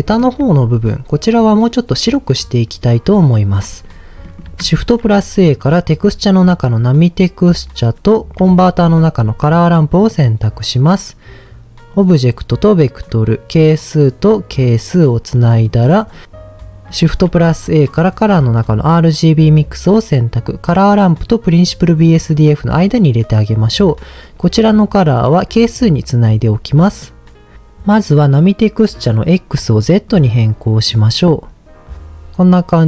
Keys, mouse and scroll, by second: 3.8-4.2 scroll down 2, 4.2 middle click, 4.7 shift+a, 8.4 shift+a, 11.9-13.0 drag, 13.7-14.8 drag, 15.4 middle click, 17.0 shift+a, 23.6-25.4 drag, 29.1-30.2 drag.